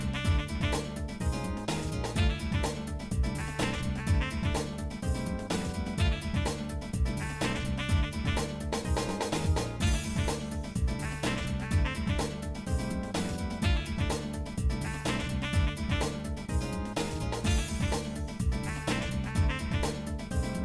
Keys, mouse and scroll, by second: 0.0 ctrl+z, 0.3 shift+middle click, 0.8 scroll up 1, 1.7 alt+shift+click, 2.9 alt+shift+click, 3.5-4.9 shift+middle drag, 5.1 shift+middle click, 6.8 alt+shift+click, 7.4-9.9 shift+middle drag, 10.4 alt+shift+click, 10.9 shift+middle click, 12.6 ctrl+Tab, 13.9 alt+shift+click, 14.9 ctrl+z, 14.9 ctrl+x, 15.9 ctrl+z, 16.7 ctrl+Tab, 17.8 shift+click, 18.4 shift+middle click, 19.1 shift+middle click, 19.4 shift+middle click, 19.7 shift+middle click, 20.0 shift+middle click, 20.3 shift+middle click.